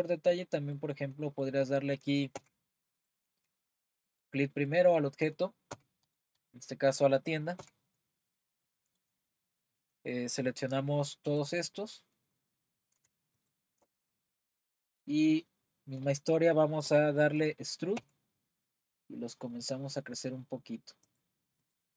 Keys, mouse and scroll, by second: 2.4 Tab, 4.7-5.7 middle drag, 5.7 Tab, 6.1 click, 6.6 click, 7.6 Tab, 8.6-10.5 middle drag, 10.5-11.3 scroll down 3, 11.4 click, 13.5 shift+click, 14.8-15.3 middle drag, 15.3-16.6 scroll up 1, 16.6-18.0 scroll up 1, 18.0 e, 21.7 click.